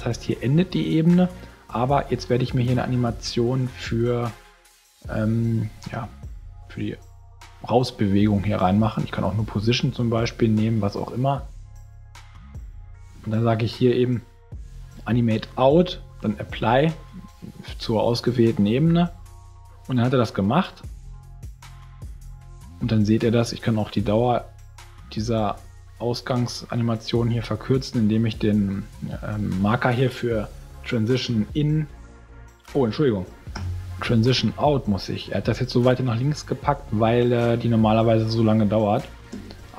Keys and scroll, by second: 33.5 super+z, 39.3 space.